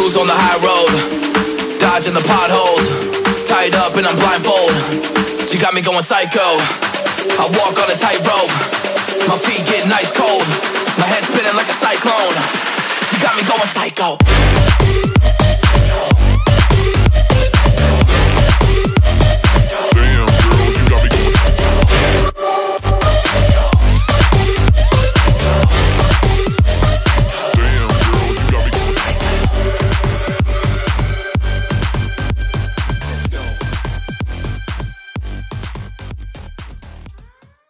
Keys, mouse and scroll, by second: 2.4 ctrl+j, 4.2 ctrl+t, 5.6 double click, 10.2 alt+scroll down 1, 10.4 alt+scroll up 1, 11.0 alt+scroll down 1, 13.0 right click, 15.6 right click, 17.7 ctrl+z, 26.0 alt+scroll down 1, 26.1 alt+scroll up 1, 26.9 alt+scroll down 1, 28.6 double click, 31.7 alt+scroll down 1, 31.8 alt+scroll up 1.